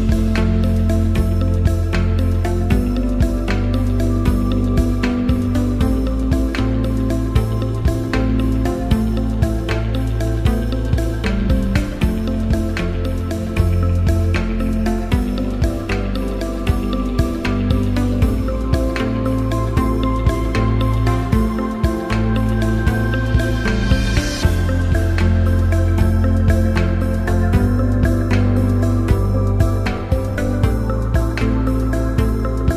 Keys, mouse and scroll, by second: 4.1 click, 5.9 click, 6.8 click, 8.9 ctrl+2, 10.9 click, 17.3 click.